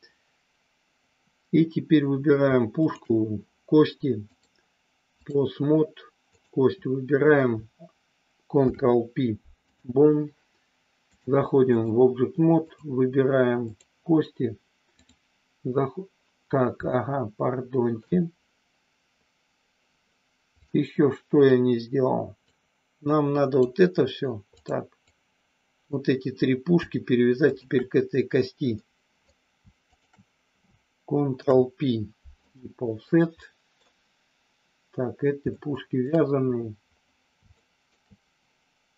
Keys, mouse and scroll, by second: 4.4 click, 8.5 ctrl+p, 11.1 click, 12.5 click, 13.7 click, 14.9-16.1 drag, 16.9-18.1 shift+middle drag, 20.7 click, 22.5-23.7 drag, 24.4 click, 25.1 click, 27.4 shift+click, 28.7 middle click, 31.3 ctrl+p, 32.9 middle click, 35.4 shift+middle click, 37.5 shift+middle click.